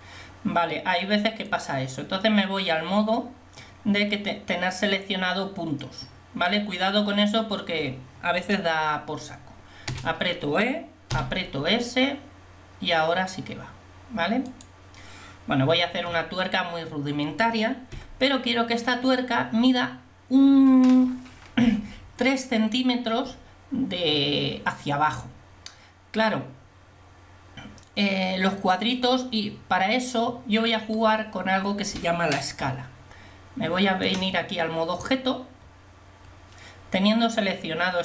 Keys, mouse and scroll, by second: 1.6-4.7 drag, 10.2 e, 15.8 a, 16.2 a, 18.0 KP_1, 32.7 Tab.